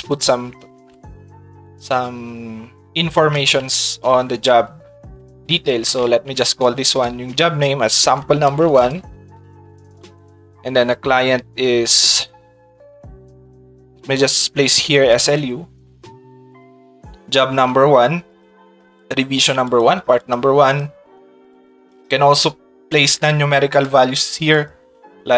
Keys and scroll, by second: 0.9 shift+s, 5.7 shift+s, 7.8-9.2 typing, 14.4 shift+s.